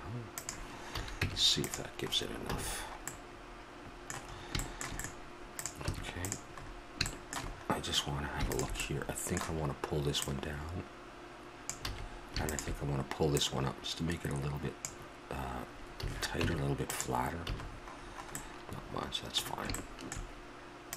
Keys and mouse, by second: 0.9 a, 1.2 Tab, 2.5 a, 5.5 right click, 5.9 Tab, 9.0-12.1 drag, 11.9 a, 12.4-15.3 drag, 16.0 a, 16.4 Tab, 17.5 a.